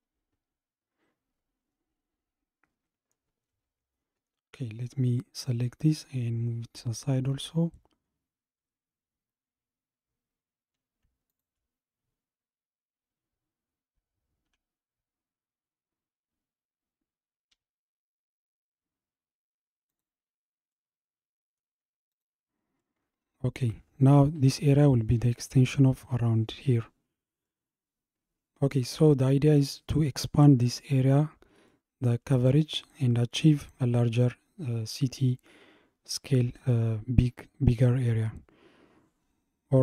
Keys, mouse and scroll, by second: 4.0 scroll down 2, 5.4 click, 6.2-10.1 scroll down 77, 11.3 shift+click, 14.5 KP_7, 20.1 g, 20.7-22.1 middle drag, 22.1 click, 22.8-25.8 middle drag, 27.5-28.8 middle drag, 28.8-30.3 scroll up 2, 30.3-31.7 scroll up 1, 31.7-32.1 shift+middle drag, 32.1-32.5 scroll up 3, 33.1-35.3 scroll up 1, 35.3 scroll up 1, 38.6 scroll down 2.